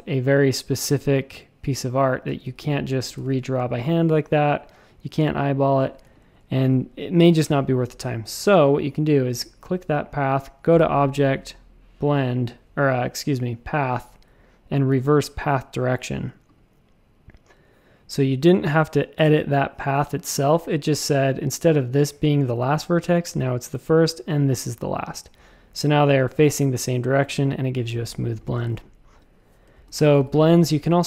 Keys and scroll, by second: 2.2 super+z, 2.4 super+z, 3.1 shift+super+a, 6.0 space, 7.9 a, 29.7 space, 30.1 v.